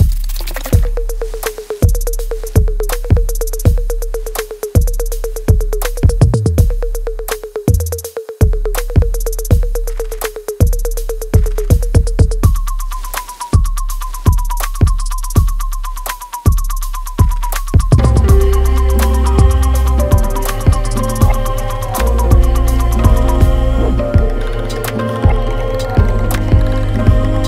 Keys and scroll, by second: 6.1 v, 6.3 v, 6.5 super+-, 6.7 super+-, 6.8 super+-, 8.0 super+-, 8.4 v, 8.5 space, 9.4 super+y, 10.2 super+y, 10.7 v, 10.7 space, 14.1 v.